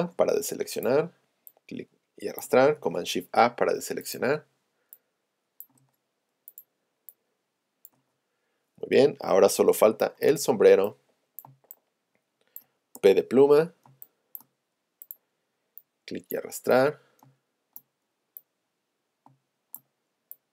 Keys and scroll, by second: 9.0 shift+super+a, 9.6 z, 9.9 space, 11.5 space, 13.0 p, 17.3 space, 19.3 space.